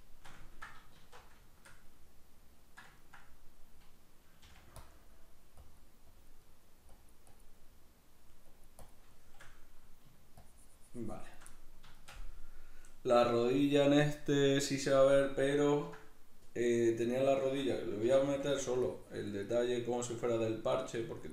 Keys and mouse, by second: 0.0-1.0 shift+middle drag, 1.0 alt+q, 1.5-4.5 shift+middle drag, 4.5 f, 4.9 click, 5.0 middle click, 5.6 click, 6.5 middle click, 6.9 click, 7.6 middle click, 8.5 click, 9.1-10.5 shift+middle drag, 10.5-11.5 shift+drag, 11.5-18.0 middle drag, 18.0 c, 18.7 click, 19.4 middle click, 20.0-21.3 drag.